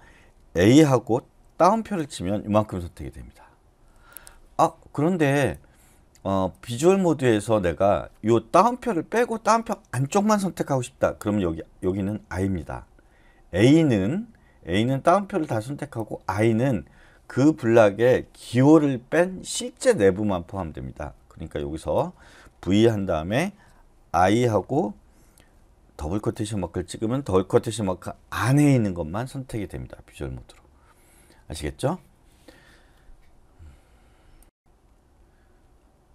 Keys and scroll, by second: 0.8 a, 5.6-6.3 typing, 22.9 v, 24.2 i, 26.0 shift+'.